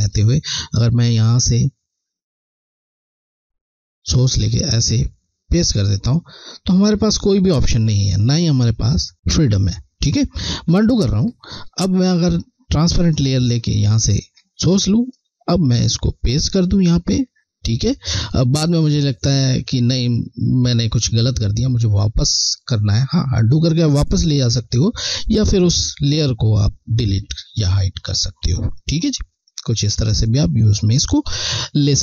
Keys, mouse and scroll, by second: 1.7 alt+Left, 10.3 click, 12.3 click, 14.0 alt+click, 25.7 click.